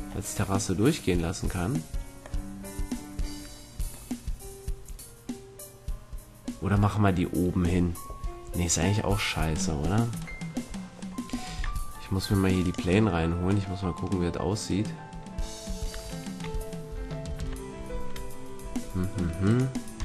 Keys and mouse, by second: 12.6-15.6 middle drag, 15.9 a, 16.9 Tab, 17.3 Tab, 19.4 click.